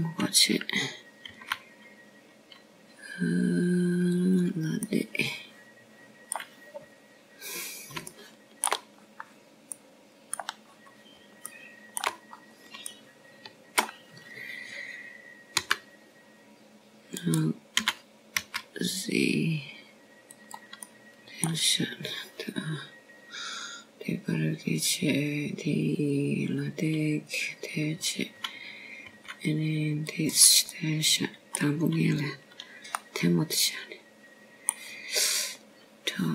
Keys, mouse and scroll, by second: 2.4 o, 4.2 s, 7.7 middle click, 9.5 scroll down 3, 10.9 shift+scroll down 1, 11.0 shift+middle click, 11.9-12.4 scroll up 4, 12.6 middle click, 13.6 scroll up 1, 14.3 shift+middle click, 15.2 scroll up 2, 15.7 shift+middle click, 18.4 g, 20.6 s, 23.7 middle click, 31.9 g, 33.5 middle click, 35.8 scroll down 1, 36.0 middle click.